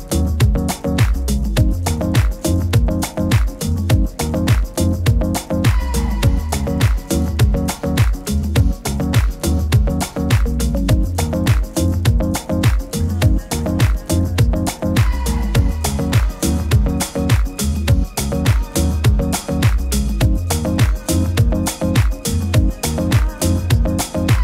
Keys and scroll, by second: 15.8 super+g.